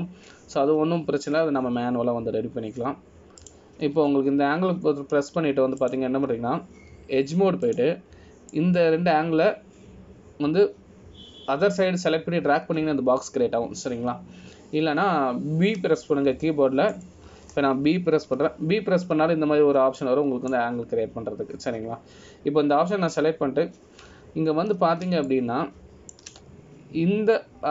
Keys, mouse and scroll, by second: 8.0 click, 9.3 1, 9.8 click, 10.7 click, 26.7 scroll up 2, 27.4 shift+middle click, 27.4 scroll up 2.